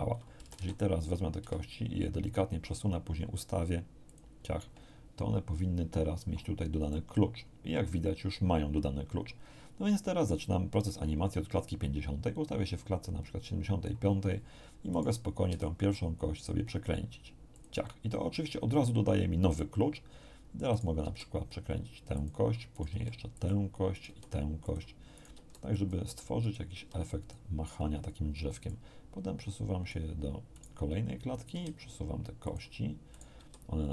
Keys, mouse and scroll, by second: 0.4 a, 1.4 g, 4.1 ctrl+click, 6.9-14.0 drag, 14.9 right click, 15.5 r, 17.5 click, 20.7 right click, 21.0 r, 22.1 click, 22.7 right click, 22.9 r, 23.3 click, 23.9 right click, 24.0 r, 24.6 click, 25.1 right click, 25.3 r, 25.7 click, 26.4 right click, 26.7 r, 27.2 click, 28.7 click, 30.5 right click, 31.5 r, 32.4 click, 33.1 right click, 33.3 r.